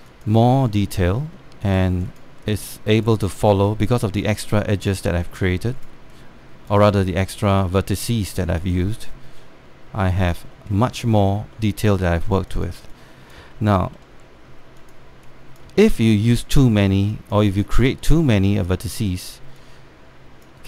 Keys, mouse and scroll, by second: 0.1 alt+middle click, 0.8 click, 1.8 alt+middle click, 2.3 click, 4.1 alt+middle click, 4.5 click, 5.8 alt+middle click, 6.4 click, 7.6 alt+middle click, 8.2-11.0 drag, 11.2 alt+middle click, 11.7 alt+middle click, 12.3 alt+middle click, 12.6 alt+middle click, 13.2 click, 14.2 alt+middle click, 14.8 alt+middle click, 15.5 click, 16.7 alt+middle click, 17.7-20.6 drag.